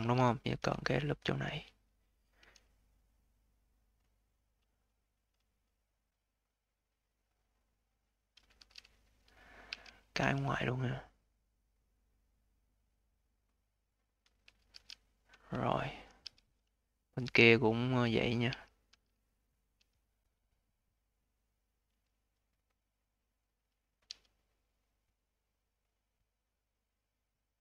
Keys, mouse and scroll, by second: 0.7-2.3 alt+drag, 2.3 a, 8.5 q, 9.5 q, 10.1 a, 14.3 scroll down 1, 14.6 q, 15.6 alt+click, 16.1 q, 16.6-18.4 alt+drag, 18.4 q, 18.8 q, 19.1-19.6 scroll up 3, 19.6 a, 23.9 a.